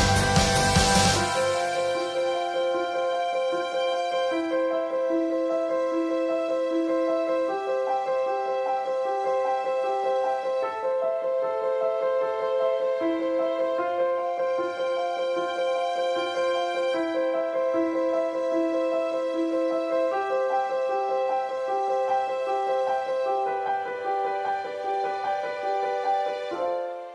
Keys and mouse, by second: 0.2 click, 0.9 ctrl+s, 1.1 click, 3.2 middle drag, 4.0-5.0 middle drag, 5.0-6.6 ], 5.3 click, 7.4-11.9 middle drag, 11.9 drag, 12.0 ctrl+s, 12.1-12.6 middle drag, 13.0-13.3 right drag, 13.3 middle click, 13.7 shift+right click, 14.7-18.0 drag, 17.0 ], 17.1 ], 17.4-18.7 middle drag, 18.8-20.4 middle drag, 20.4-21.7 drag, 21.7-26.0 middle drag, 26.0 ctrl+s, 26.1 middle drag, 26.5 middle click, 26.8 ctrl+s, 26.9 middle drag.